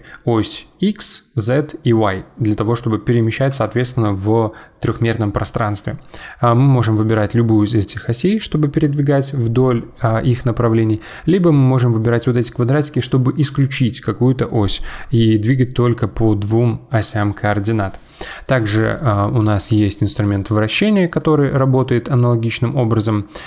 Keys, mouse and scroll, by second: 6.9 click, 8.3 click, 15.5 click, 20.1-21.2 drag.